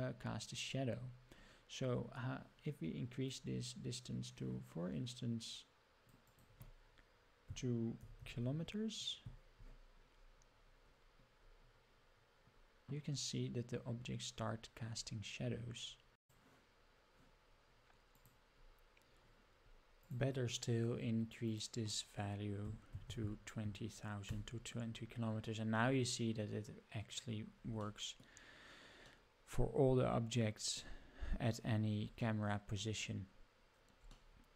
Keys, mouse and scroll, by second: 0.9-2.0 scroll down 12, 2.1 scroll up 2, 3.3-9.3 drag, 10.2-12.0 scroll up 16, 12.0-12.4 scroll down 3, 13.4 scroll up 2, 14.3-15.6 scroll down 8, 15.9-17.1 scroll up 9, 17.5-18.1 scroll up 4, 18.1-18.5 drag, 18.7 scroll up 2, 19.1-19.7 scroll down 1, 20.0 click, 21.4 click, 23.0 KP_0, 23.2 KP_0, 26.2-26.8 scroll up 3, 27.9-28.3 shift+middle drag, 29.1-30.9 middle drag, 31.2 scroll down 2, 31.6 scroll up 4, 32.2-32.8 shift+middle drag, 33.3-33.7 scroll down 2, 34.2-34.5 shift+middle drag.